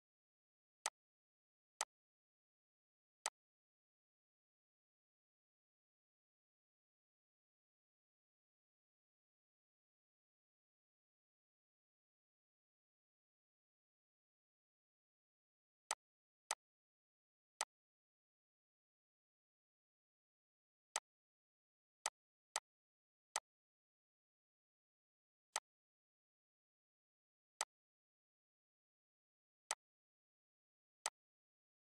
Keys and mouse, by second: 0.5-15.6 drag, 20.6 right click, 21.7 click, 25.3 click.